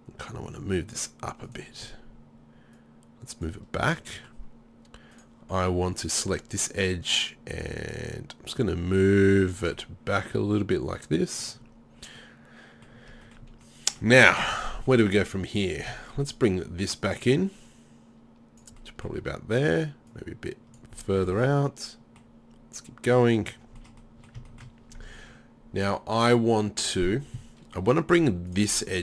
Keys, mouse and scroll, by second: 4.0 middle click, 12.3 middle click, 12.5 middle click, 12.7 middle click, 13.4 middle click, 15.6-16.7 right drag, 16.7 middle click, 19.4-22.1 middle drag, 23.8-25.0 middle drag, 26.6 middle click, 28.8 click, 28.8 middle click.